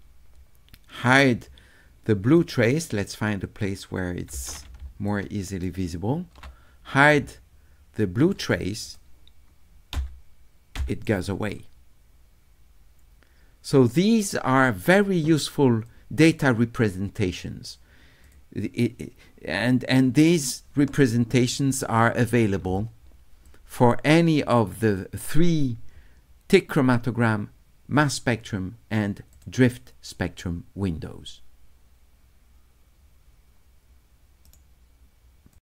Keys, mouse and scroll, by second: 1.1 click, 2.4-4.3 right drag, 5.1 shift+right click, 7.1-8.3 right drag, 8.9 click, 15.9-17.4 drag, 18.2 click, 23.5 click, 29.3 click, 34.5 right click, 35.5 click.